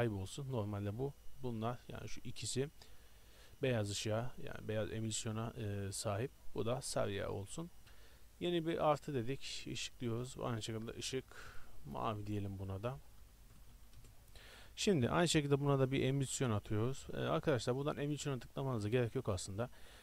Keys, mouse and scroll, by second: 0.5-3.4 middle drag, 3.4-5.3 drag, 6.3-14.1 drag, 14.1 i, 14.1 BackSpace.